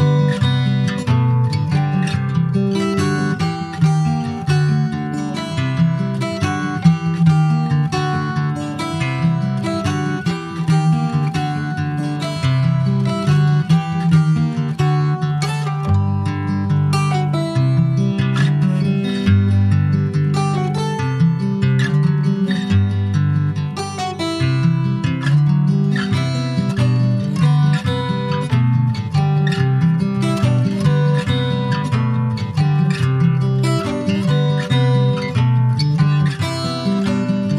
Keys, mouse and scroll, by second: 0.4 click, 1.9 click, 4.7 middle click, 5.1 alt+z, 5.7 middle click, 6.6 3, 6.7 click, 8.1 ctrl+s, 8.6 shift+click, 9.0-10.0 middle drag, 10.0 shift+click, 10.4 middle click, 11.1 shift+click, 11.4 middle click, 11.9 ctrl+s, 12.6 e, 13.1 alt+s, 20.1 ctrl+b, 28.6-30.9 drag, 31.2 Tab, 31.4 scroll down 2, 31.6 middle click, 32.0 ctrl+s, 32.1 click, 32.5 middle click, 33.3 click, 34.0 alt+middle click, 34.2 alt+scroll up 1, 34.3 alt+z, 34.9 click, 35.4 Tab, 36.0 click, 36.9-37.5 scroll up 2.